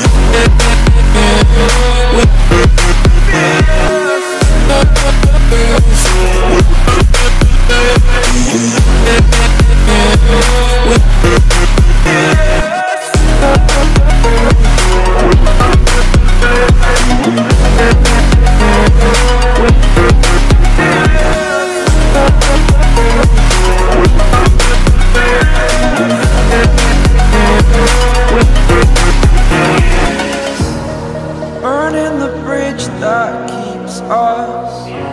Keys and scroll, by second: 5.3 ctrl+-, 6.1 Delete, 7.1 ctrl+z, 7.8 ctrl+0, 17.5 ctrl+0, 19.3 Delete, 19.8 ctrl+z, 21.0 ctrl+0, 21.5 e, 25.5 v, 26.2 ctrl+0, 27.9 t, 32.2-35.1 typing.